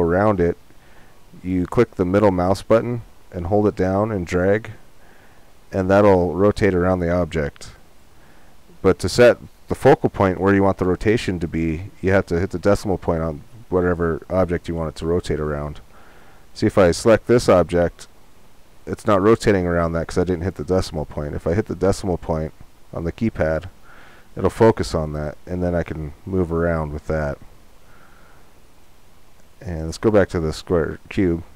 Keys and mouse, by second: 1.5-4.0 middle drag, 4.1 middle click, 4.5 click, 7.8-9.7 drag, 14.4-16.9 middle drag, 16.9-19.1 drag, 19.1 middle click, 26.8-30.4 middle drag, 31.3 middle click.